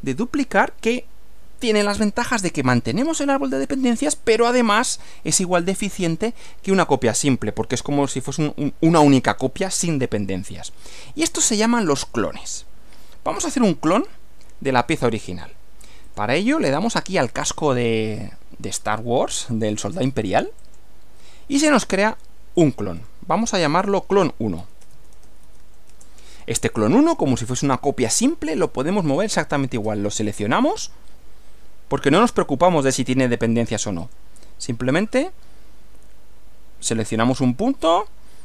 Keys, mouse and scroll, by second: 13.9 click, 16.1 click, 20.6 click, 22.6 click, 23.0 right click, 23.8 click, 24.6-26.1 typing, 30.1 click, 34.0 click, 37.1 click.